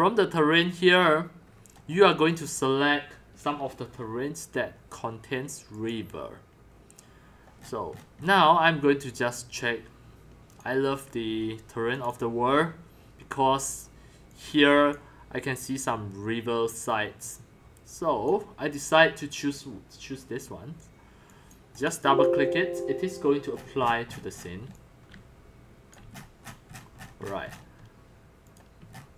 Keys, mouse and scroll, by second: 0.6-1.0 scroll, 1.4-2.4 scroll, 2.5 scroll up 1, 5.9-7.6 drag, 7.6-9.1 scroll, 9.1-9.8 scroll, 10.5 click, 12.2 click, 14.3-14.9 drag, 17.3-18.5 drag, 19.4-20.7 drag, 21.2 click, 21.8 click, 23.5-24.7 scroll, 24.8-26.4 typing, 26.5-27.9 shift+middle drag, 28.6-29.0 drag, 29.0-29.1 shift+middle drag.